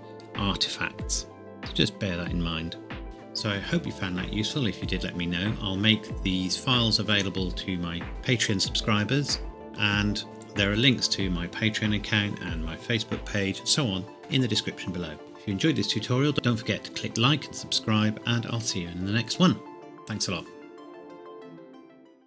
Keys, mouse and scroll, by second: 0.9-1.7 scroll down 1.